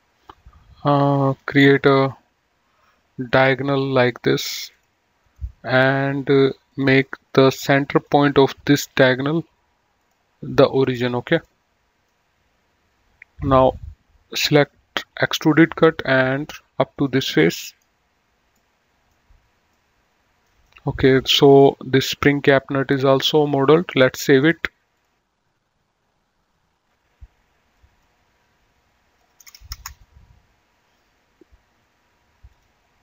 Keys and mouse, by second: 1.5 click, 3.3 click, 4.9 click, 5.4 right click, 5.9 click, 8.1 ctrl+click, 10.1 click, 11.6 middle click, 14.4 click, 15.7 click, 17.1 click, 17.9 right click, 18.8 middle click, 24.3 click, 26.4 click, 27.9 click, 29.6 BackSpace, 29.7 Return, 32.6 click.